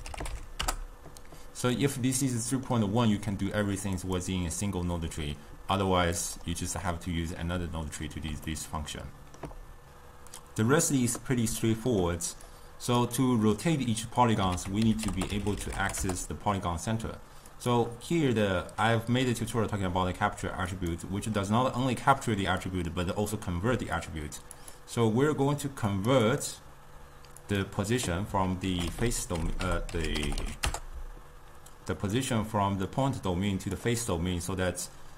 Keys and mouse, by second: 2.0-4.0 middle drag, 4.0 click, 6.2 click, 8.7-9.8 ctrl+middle drag, 12.1 middle click, 12.6 click, 14.6 ctrl+a, 15.2 t, 20.9-23.8 drag, 26.3-28.7 drag, 28.7 ctrl+a, 29.7 BackSpace, 33.2-35.1 drag.